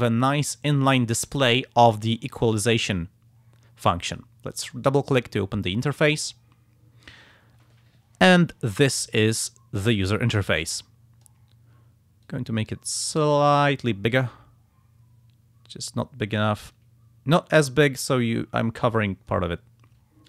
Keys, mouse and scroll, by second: 4.6 click, 10.0-11.5 drag, 12.2-19.6 drag.